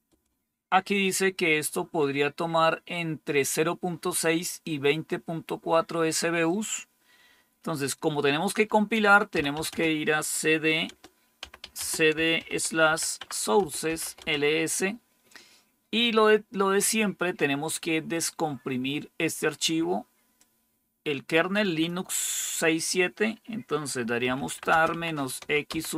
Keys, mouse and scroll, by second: 0.0-0.5 typing, 6.4 click, 9.0-9.9 typing, 10.8 Return, 11.3-14.4 typing, 20.3-21.8 drag, 23.9-25.9 typing.